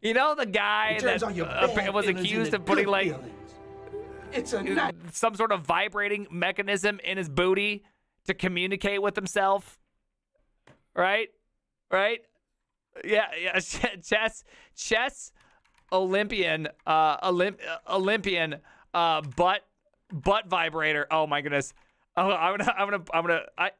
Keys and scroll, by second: 13.1 ctrl+t, 13.1-16.3 typing, 16.8 Down, 17.0 Down, 17.8-22.2 typing.